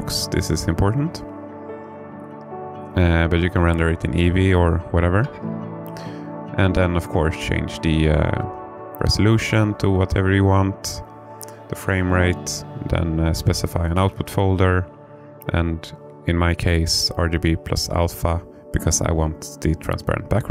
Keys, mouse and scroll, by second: 6.3 click, 19.7 click.